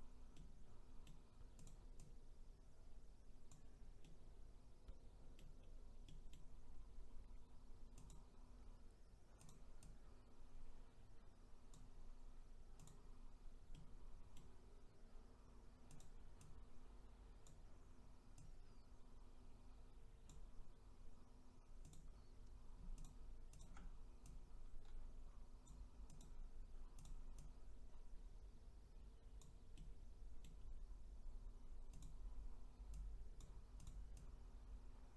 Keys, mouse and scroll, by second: 0.3-1.7 middle drag, 1.7 click, 2.2 click, 4.0-5.6 middle drag, 5.6-6.1 scroll up 1, 6.1-8.1 middle drag, 8.1 click, 9.5 click, 12.9 click, 13.7-16.0 middle drag, 16.0 click, 16.5 click, 21.9 click, 23.0 shift+click, 23.6 shift+click, 24.3 click, 26.2 click, 27.4 click, 29.7-32.0 middle drag, 32.0 click, 33.0 click, 34.2 click.